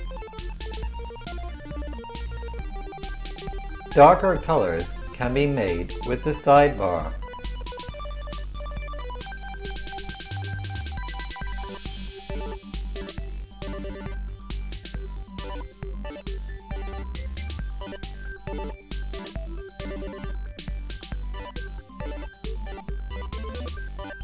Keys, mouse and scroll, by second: 0.5-24.0 drag, 24.0 right click.